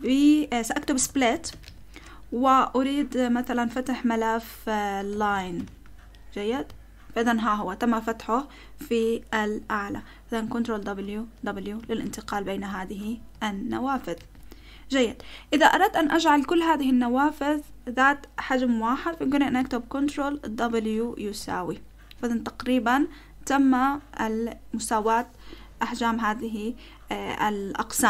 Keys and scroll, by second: 0.7-2.1 typing, 4.9-6.1 typing, 6.5 Return, 10.8 ctrl+w, 11.4 ctrl+w, 11.8 ctrl+w, 12.0 ctrl+w, 12.3 ctrl+w, 13.0 ctrl+w, 13.3 ctrl+w, 14.2 ctrl+w, 20.7 ctrl+w, 21.3 typing.